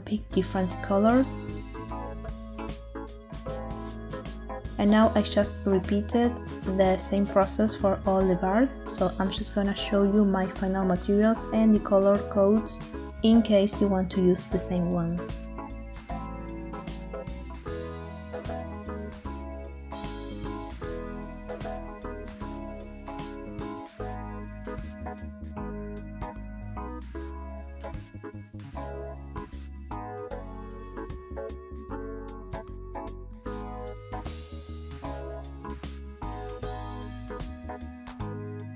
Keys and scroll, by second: 1.6 Return, 4.5 Return.